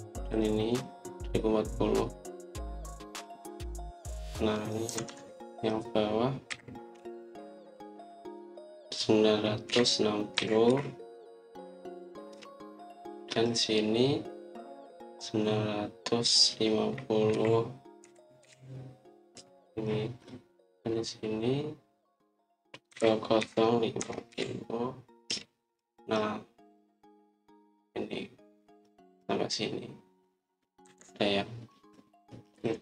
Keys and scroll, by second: 5.8 Escape, 6.0 Escape, 7.4-7.9 typing, 10.3-11.6 typing, 13.2 Return, 18.2-19.3 typing, 20.2 Return, 20.9 typing, 23.5-25.2 typing, 26.2 Return, 26.7 typing, 31.7 Escape.